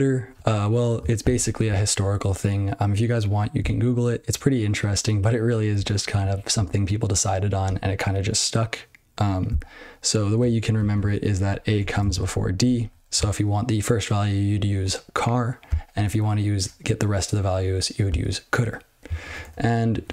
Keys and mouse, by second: 10.7 ctrl+n, 10.9-11.4 ctrl+f, 11.7 ctrl+f, 12.0 ctrl+space, 12.1-12.5 ctrl+f, 12.7 ctrl+g, 19.2 Return, 19.4 Return, 19.9 ctrl+/.